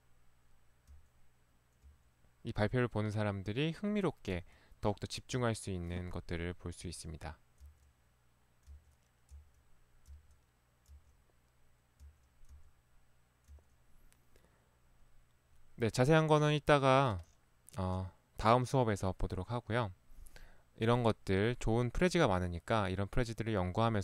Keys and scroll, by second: 0.9 Right, 2.0 Right, 4.4 Right, 5.4 Right, 6.9 Right, 7.7 Right, 8.8 Right, 9.3 Right, 10.9 Right, 12.0 Right, 12.5 Right, 13.5 Right.